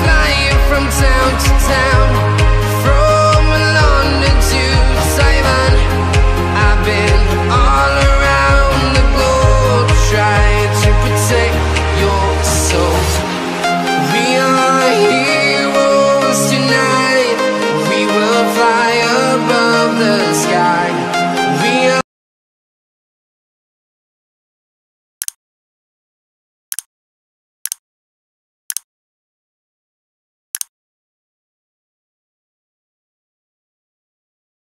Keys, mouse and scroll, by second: 0.8 Return, 1.1 click, 3.0 0, 4.1 s, 6.4 s, 7.1 ctrl+shift+Num_Lock, 8.2 click, 15.6 c, 16.0 click, 16.6 ctrl+v, 17.1 click, 19.4-20.5 scroll up 1, 20.5 click.